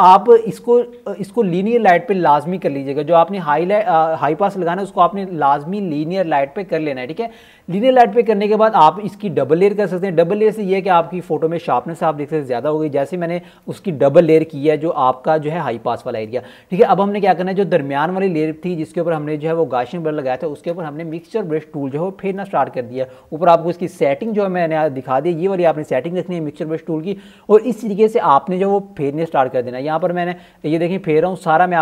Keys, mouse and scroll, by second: 4.6-5.0 ctrl+alt+scroll up 1, 5.3-6.2 ctrl+alt+scroll up 4, 9.5 click, 10.2-10.5 alt+scroll up 1, 10.7 alt+scroll up 1, 11.5 right click, 12.6 click, 13.8-14.2 alt+scroll down 1, 14.2-14.7 alt+scroll up 2, 18.6 [, 19.2 click, 20.7-23.4 typing, 20.8 click, 21.8 click, 22.8 click, 24.4 click, 25.7 ], 26.0 click, 29.6-31.8 typing, 30.3 click, 30.5 click, 30.9 click, 31.2 click, 31.4 click, 31.7-31.8 ctrl+alt+scroll up 2.